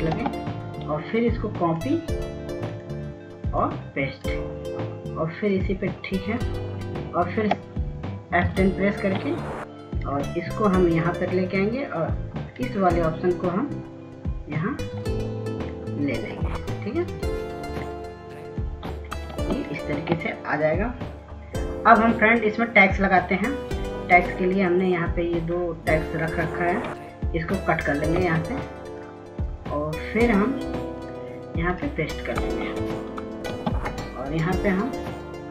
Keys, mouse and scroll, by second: 3.4 ctrl+space, 5.1 click, 11.8 F10, 13.4 click, 22.7 ctrl+space, 23.1 click, 31.6 x, 32.3 click.